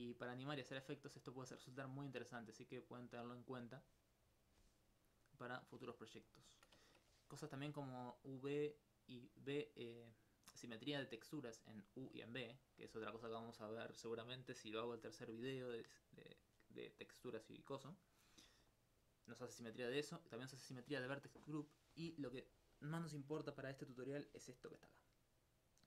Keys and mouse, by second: 6.3 alt+click, 6.4 alt+s, 22.5 alt+click, 22.6 alt+c.